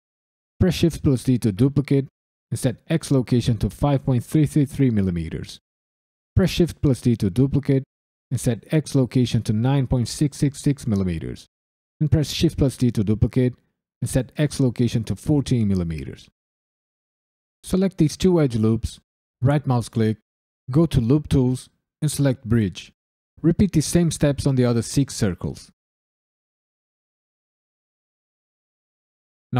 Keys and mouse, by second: 0.6 shift+d, 2.1 right click, 3.1-5.3 drag, 4.4 KP_3, 4.6 KP_3, 6.3 shift+d, 8.0 right click, 8.9-11.1 drag, 10.1 KP_6, 12.1 shift+d, 13.0 right click, 14.0-15.2 drag, 16.5 click, 17.0 ctrl+click, 19.4 right click, 21.0-22.4 right drag, 23.2 click, 23.6 ctrl+click, 23.9 right click, 24.4 click, 24.7 ctrl+click, 24.9 alt+shift+click, 25.0 right click, 25.4 click, 25.7 ctrl+click, 25.9 alt+shift+click, 26.3 right click, 26.5 click, 27.4 right click, 27.6 click, 28.1 alt+shift+click, 28.2 right click, 28.7 click, 29.0 ctrl+click, 29.4 right click.